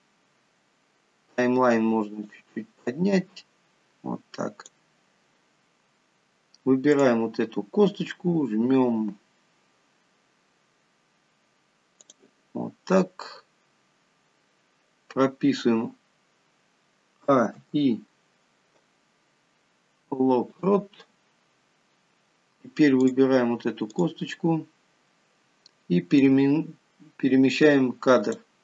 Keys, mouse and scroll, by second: 2.7 click, 7.3 click, 12.5 click, 17.6 a, 18.0 i, 23.4 click, 24.3 click, 26.7 click.